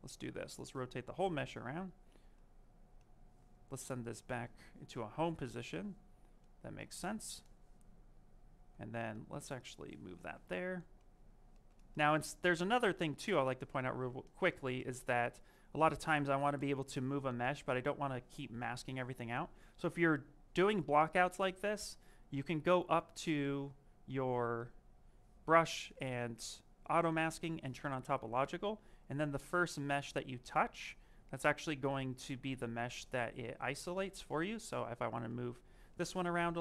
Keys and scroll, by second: 12.2 ctrl+z, 12.7 ctrl+z, 16.4 m.